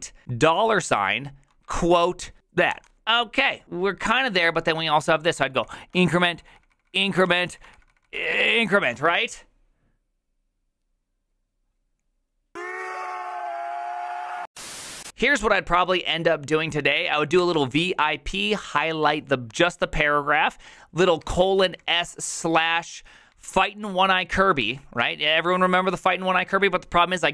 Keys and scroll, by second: 0.0-2.4 typing, 2.7 Return, 4.8-5.9 typing, 6.2 ctrl+a, 6.7 ctrl+a, 6.8 ctrl+a, 7.2 ctrl+c, 7.6 j, 7.8 ctrl+a, 8.0 ctrl+a, 8.7 ctrl+c, 17.1-18.2 typing, 21.2-22.1 typing, 23.3 typing, 24.6-25.2 typing.